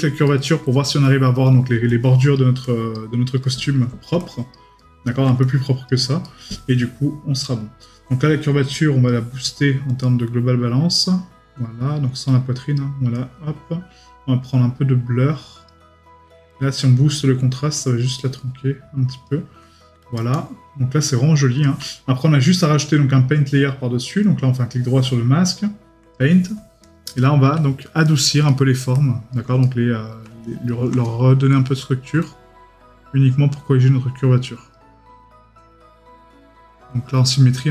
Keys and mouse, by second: 0.2 right click, 0.9 middle click, 3.4 right click, 4.8 right click, 6.2 right click, 24.1 right click, 27.8 right click.